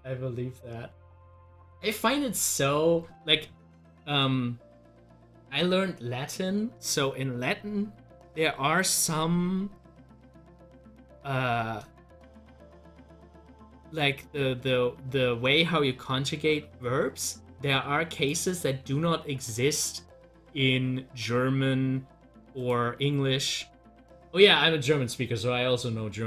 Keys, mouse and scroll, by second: 3.7 scroll up 1, 4.2-7.5 middle drag, 12.9 middle click, 13.0 click, 17.1 scroll down 1, 18.1 scroll down 1, 19.0 scroll up 1, 20.1 scroll down 1, 20.5-22.4 middle drag, 22.5 double click, 23.4 scroll up 1.